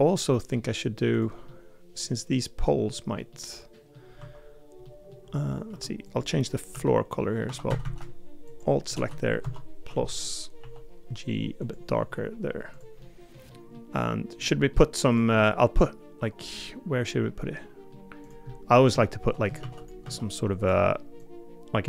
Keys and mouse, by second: 0.0 middle click, 1.5 middle click, 2.6 middle click, 3.3 middle click, 4.2 Tab, 4.8 middle click, 5.7 Tab, 6.7 l, 7.2 middle click, 7.5 3, 7.7 a, 7.8 a, 9.4 ctrl+KP_Subtract, 10.6 g, 13.0 middle click, 13.5 middle click, 14.4 middle click, 15.4-17.9 middle drag, 18.5 middle click, 19.0 shift+middle click, 19.6 shift+d, 20.0 s.